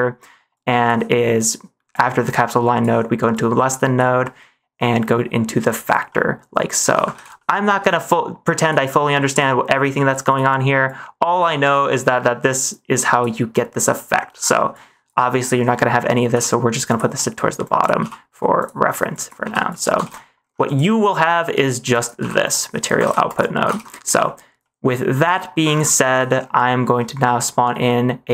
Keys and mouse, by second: 0.5 click, 1.8 click, 3.4 click, 4.3 middle click, 6.0 middle click, 7.1 ctrl+s, 7.4 middle click, 7.8 click, 9.4 click, 10.3 click, 10.8 click, 11.7 ctrl+s, 11.9 middle click, 12.7 click, 14.0 middle click, 14.7-15.0 drag, 15.8 middle click, 16.2 g, 17.1 middle click, 17.7 click, 17.9 g, 19.0 drag, 19.3 g, 20.0 ctrl+s, 20.1 middle click, 20.6 click, 21.3 middle click, 21.8 click, 22.1 g, 23.0 ctrl+s, 23.2 click, 23.7 ctrl+s, 24.1 middle click, 24.6 middle click, 26.1 middle click, 26.9 middle click, 27.8 middle click.